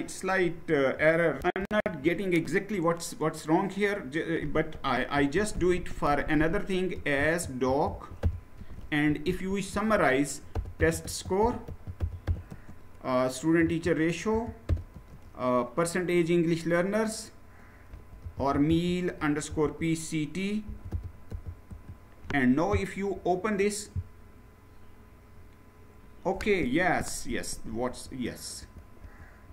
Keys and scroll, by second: 1.3 shift+F9, 4.9-5.4 typing, 6.7-14.7 typing, 17.4-19.3 typing, 20.4-21.0 typing, 21.5 Return, 27.1 Page_Down, 27.5 Page_Down, 27.8 Page_Down, 28.4 Page_Down, 28.8 Page_Down, 29.3 Page_Down.